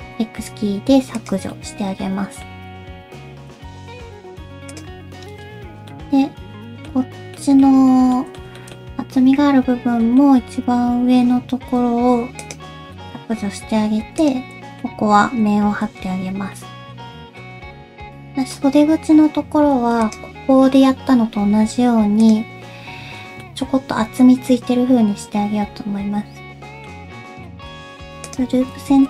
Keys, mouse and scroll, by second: 1.5 middle click, 2.5 Tab, 3.5 /, 4.7 click, 5.2 Tab, 5.9 middle click, 6.9-7.4 scroll down 2, 7.4 middle click, 7.7-8.1 scroll up 3, 8.1 middle click, 8.6 shift+middle click, 8.8-10.0 scroll up 1, 10.0 middle click, 11.6 x, 13.0 shift+middle click, 13.2-13.6 scroll up 3, 13.6 2, 14.2 alt+click, 14.5 scroll up 1, 14.8 middle click, 15.8 f, 16.2-16.6 scroll down 4, 16.6 middle click, 17.2 shift+middle click, 17.4 scroll down 1, 17.6 middle click, 17.6-18.1 scroll up 2, 18.5 middle click, 19.8 Tab, 20.0 click, 22.2 click, 23.4 Tab, 23.4 middle click, 27.4 middle click, 27.4-28.0 scroll up 1, 28.3 alt+click, 28.6 alt+z, 28.9 alt+z.